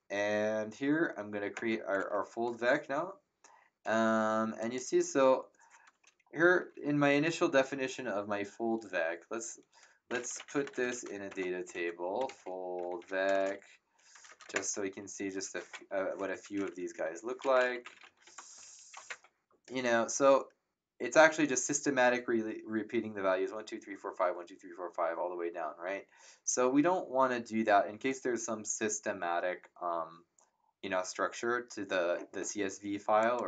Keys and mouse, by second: 1.5 ctrl+Return, 4.6 click, 9.8-14.1 typing, 14.4 Return, 16.3 Up, 16.8 Home, 17.2-18.6 typing, 18.9 Return, 18.9 KP_Enter, 33.2 click.